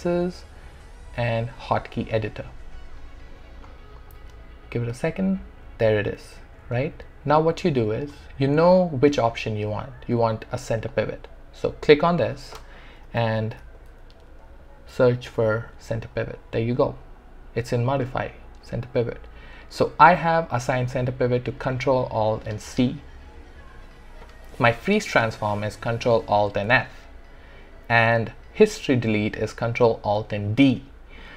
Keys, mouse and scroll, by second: 2.0 click, 10.8 click, 13.0-13.6 typing, 14.7-15.4 typing.